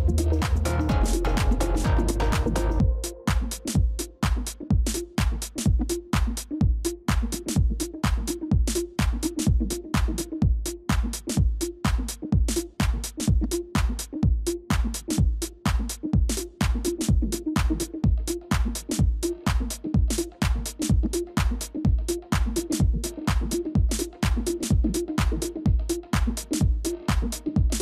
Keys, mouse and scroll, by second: 1.0 ctrl+[, 1.8 ctrl+shift+[, 3.2 ctrl+shift+], 12.9 ctrl+z, 18.1 ctrl++, 21.3 ctrl+space, 21.5 ctrl+click, 22.1 space, 22.7 space, 26.2 space, 26.5 ctrl+-, 26.9-27.8 ctrl+-.